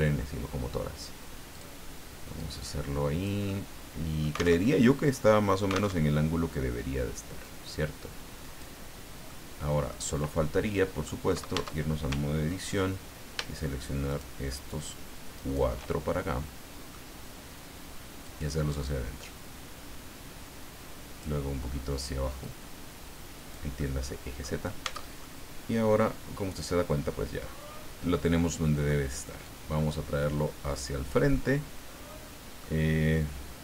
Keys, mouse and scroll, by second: 1.5 click, 2.4 click, 3.5-4.6 middle drag, 4.6 alt+Tab, 6.0 alt+Tab, 7.4-8.8 drag, 9.3 middle click, 10.5 middle click, 11.5 Tab, 14.1 shift+right click, 15.3 shift+right click, 15.9-17.1 shift+middle drag, 18.2-21.4 drag, 22.4-23.7 drag, 23.8 middle click, 24.8 Tab, 25.2-29.0 middle drag, 29.4-31.3 drag, 31.3-32.8 middle drag.